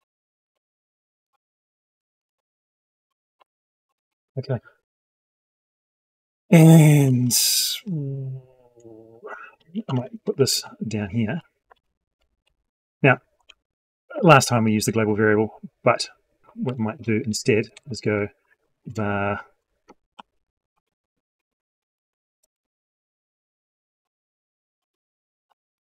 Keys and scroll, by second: 10.2 ctrl+x, 11.6 ctrl+v, 23.9 ctrl+c, 24.6 ctrl+v.